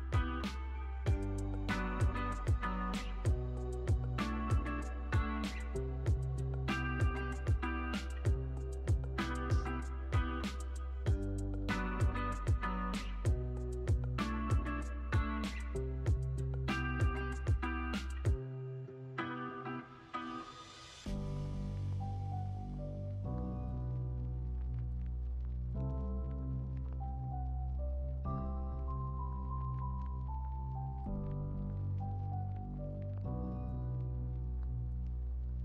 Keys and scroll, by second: 5.8 super+s, 12.8 super+s, 17.6 u, 23.9 super+s, 25.7 space, 35.5 space.